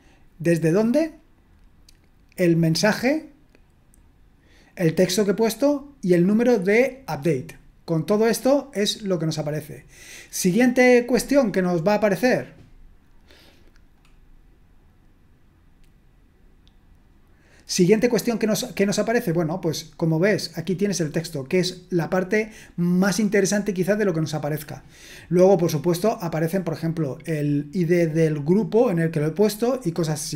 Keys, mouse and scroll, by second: 0.8 click, 2.7 click, 13.9 click, 20.8-23.0 drag, 27.1-28.1 drag.